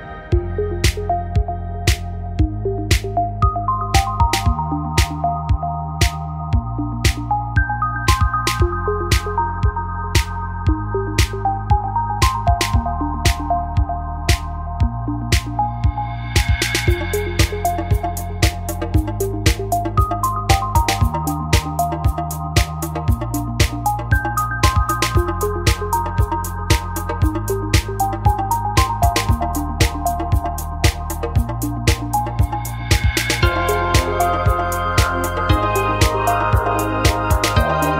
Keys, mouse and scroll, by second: 0.1 right click, 0.8 middle click, 0.9-3.2 drag, 1.1-3.2 right drag, 3.2 w, 4.2-5.7 middle drag, 6.5 click, 6.8-9.2 right drag, 8.7 x, 9.6 w, 10.5-11.9 right drag, 11.5 w, 12.0 middle click, 13.1 right click, 13.5 w, 13.9 middle click, 16.7-19.3 right drag, 19.3 w, 20.3 ctrl+z, 20.8 w, 21.8 ctrl+z, 22.4 w, 22.9 a, 27.3 shift+space, 28.8-32.6 drag, 35.9-37.9 drag.